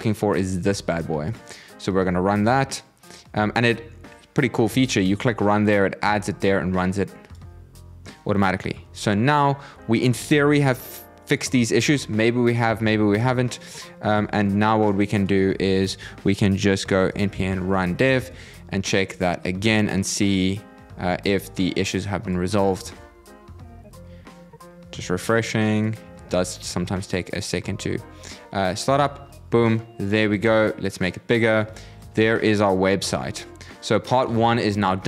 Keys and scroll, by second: 22.5 super+r.